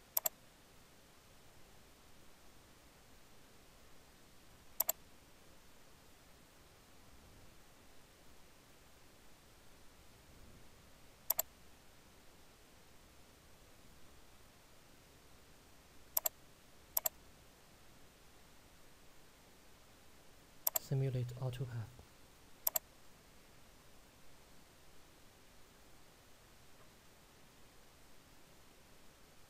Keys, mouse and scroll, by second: 1.3 click, 4.8 click, 11.3 click, 16.2 click, 17.2 right click, 24.3 click.